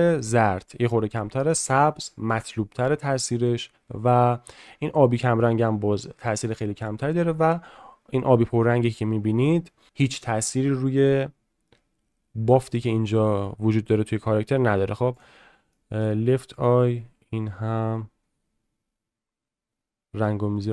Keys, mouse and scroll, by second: 15.7 middle click, 16.5-20.7 drag.